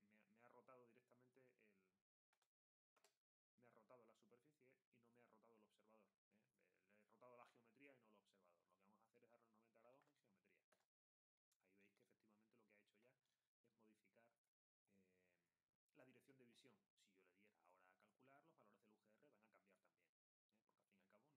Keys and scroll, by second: 2.3 0, 9.6-10.5 typing.